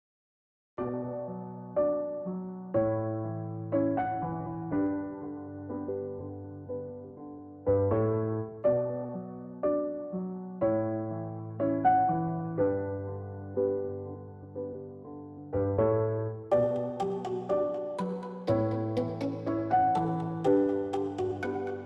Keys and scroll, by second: 0.0-21.8 typing, 12.2 ctrl+t, 20.0 ctrl+j.